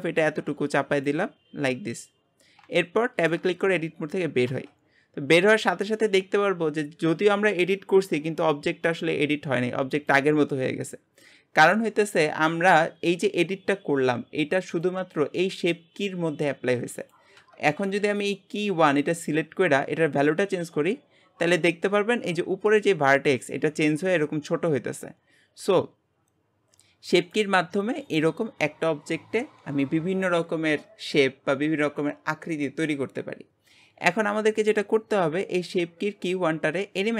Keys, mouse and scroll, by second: 2.8-4.5 shift+middle drag, 4.5 Tab, 20.4-25.5 drag.